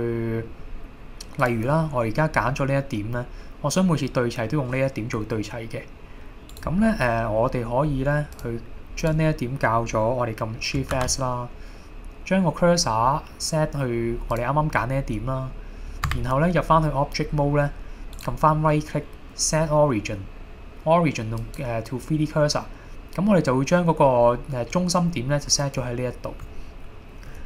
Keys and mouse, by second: 2.5 middle click, 5.2 middle click, 6.5-8.1 right drag, 9.0 click, 11.0 shift+s, 16.1 Tab, 18.2-21.6 right drag, 23.8 middle click, 24.2-24.7 middle drag, 25.8-27.4 drag.